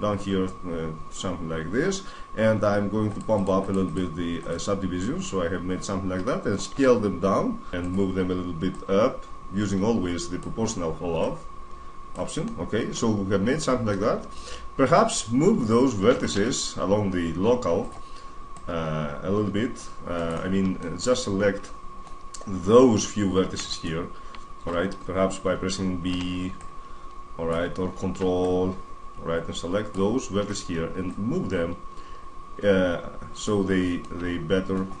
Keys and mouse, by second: 5.4-6.5 drag, 6.5-7.5 middle drag, 6.5 s, 7.7-10.5 drag, 11.0-12.3 drag, 12.3-14.2 middle drag, 14.5-16.0 middle drag, 16.0 alt+space, 18.3-20.3 drag, 20.6-22.5 middle drag, 23.5-25.3 right drag, 25.3-27.9 middle drag, 25.9 b, 28.1 middle click, 28.2-30.2 drag, 30.9-32.7 drag, 33.4-35.0 middle drag.